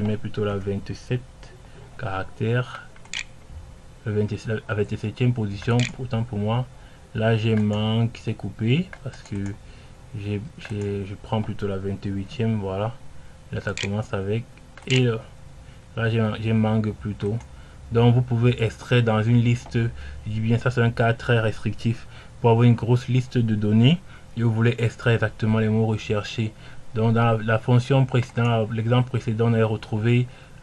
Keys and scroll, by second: 1.9-3.2 typing, 3.4 Return, 6.2 Menu, 12.7-13.7 typing, 14.2 Menu, 14.8 Return.